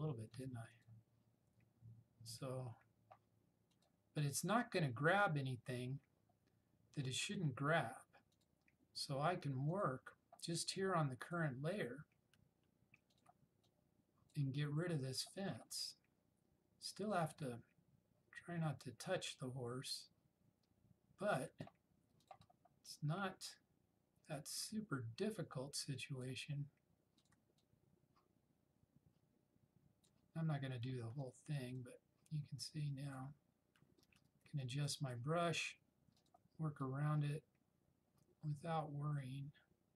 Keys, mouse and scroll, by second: 13.3 alt+click, 14.1-14.7 drag, 34.1-35.0 typing, 36.3-39.9 alt+drag.